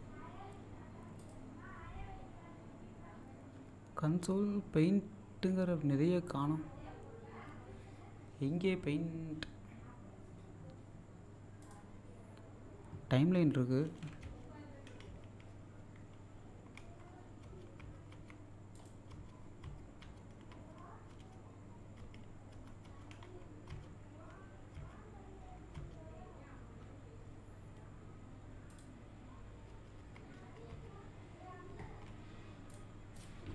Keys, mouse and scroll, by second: 1.2 click, 11.6 click, 14.3 F1, 15.1 F4, 16.8 F2, 17.4 F1, 17.8 F2, 18.7 click, 19.1 F1, 19.6 F2, 20.5 F3, 20.5 F4, 21.1 F5, 22.0 F6, 22.5 F7, 22.9 F8, 23.7 F1, 24.8 F2, 25.7 F1, 28.7 click, 29.7 F1, 30.0 F2, 30.4 F1, 30.7 F2, 32.7 click.